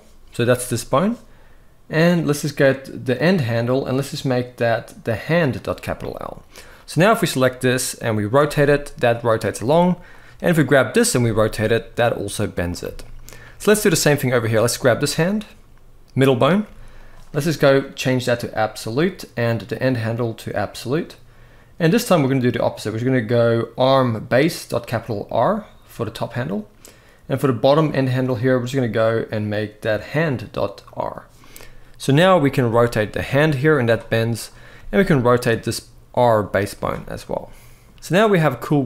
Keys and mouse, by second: 2.9-5.4 drag, 8.1 r, 10.8 r, 12.7 shift+middle click, 16.4 g, 17.5-18.6 drag, 19.7-20.4 drag, 21.6-24.8 drag, 28.1-30.7 drag, 32.4 r, 34.5 r, 36.9-37.5 middle drag, 37.9 middle click, 37.9 g.